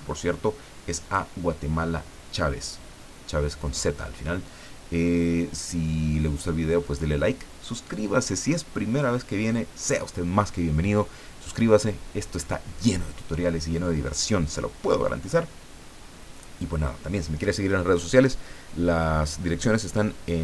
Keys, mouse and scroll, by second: 1.0 click.